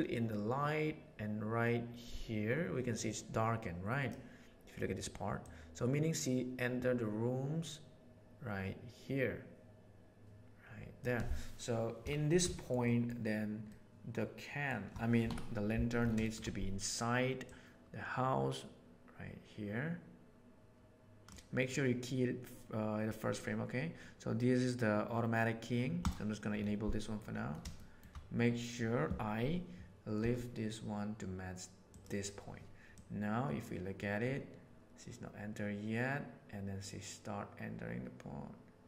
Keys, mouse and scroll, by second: 2.7 click, 5.4 click, 8.5-11.0 drag, 12.8 middle drag, 13.7-14.6 middle drag, 15.2 KP_7, 16.2 shift+middle click, 17.5-21.2 drag, 26.0 click, 27.8 shift+click, 30.2 g, 33.0-35.8 drag.